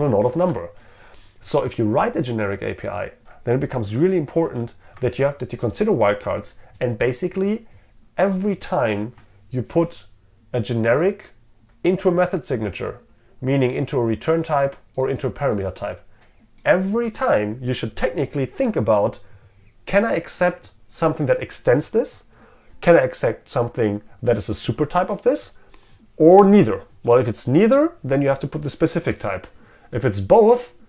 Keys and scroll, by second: 0.5 ctrl+Tab, 4.5 ctrl+z.